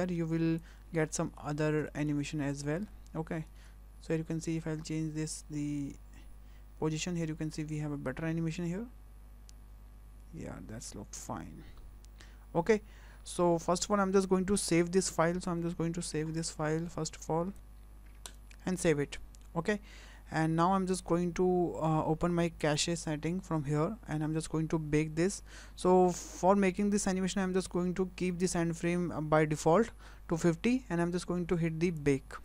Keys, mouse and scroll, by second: 0.8 scroll down 3, 1.1 shift+middle click, 1.5 scroll down 2, 1.9 shift+middle click, 2.2 scroll up 3, 2.6 shift+middle click, 2.9-3.6 scroll down 2, 3.6 space, 13.8 space, 16.3 ctrl+shift+s, 22.6 click, 32.0 click.